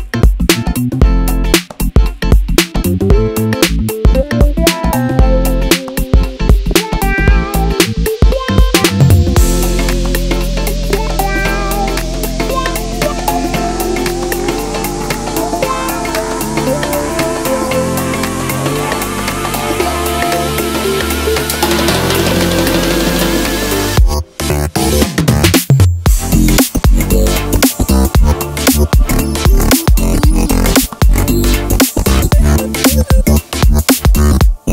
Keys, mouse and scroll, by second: 0.2 click, 0.3-1.6 middle drag, 1.6 click, 1.9 shift+s, 3.4 Tab, 4.3 shift+s, 4.6 Escape, 4.8 shift+a, 8.2 click, 8.5 s, 9.4 click, 9.6-12.4 middle drag, 10.6 ctrl+r, 11.1 Escape, 12.4 click, 12.7 x, 13.9 KP_3, 15.2 ctrl+r, 15.6 Escape, 15.8 click, 16.1 x, 17.0 click, 17.3 click, 17.9 o, 22.2 click, 22.7 o, 23.6 KP_Enter, 23.9-27.3 middle drag, 24.9 scroll down 2, 25.1 ctrl+z, 27.3 click, 27.5-28.0 scroll up 1, 28.0 click, 28.4 l, 29.1 KP_3, 29.4-31.1 shift+middle drag, 30.6 ctrl+r, 30.9 Escape, 31.1 click, 31.3 x, 31.8 click, 32.2 x, 33.3 click, 33.8 g.